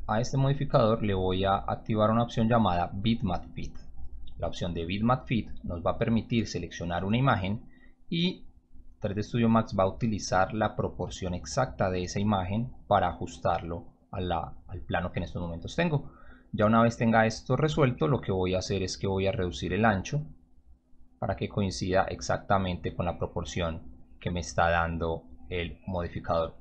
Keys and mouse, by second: 3.9 click, 6.3 click, 9.7 click, 17.9 click, 19.6-23.0 drag, 24.4 click, 24.6 click, 25.9 click.